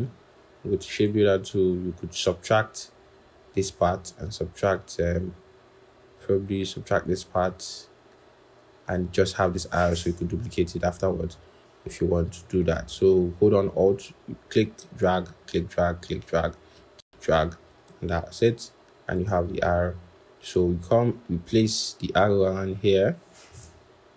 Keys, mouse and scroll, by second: 13.6 alt+click, 15.3 alt+click, 19.6-20.9 scroll.